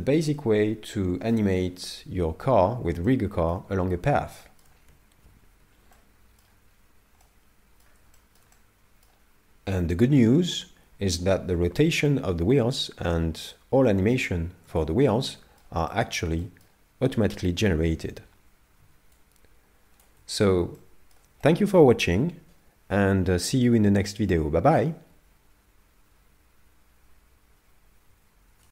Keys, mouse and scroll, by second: 0.0 shift+middle click, 3.1 shift+middle click, 3.9-4.4 scroll down 2, 4.4 shift+middle click, 5.3 n, 6.0 middle click, 6.7-7.3 scroll up 2, 7.2 middle click, 8.2 middle click, 8.5 middle click, 13.5 middle click, 14.8 shift+middle click, 15.3 middle click, 15.9 shift+middle click, 16.4 middle click, 18.3-18.6 scroll down 5, 19.2 shift+click, 20.8 middle click, 21.4 shift+middle click.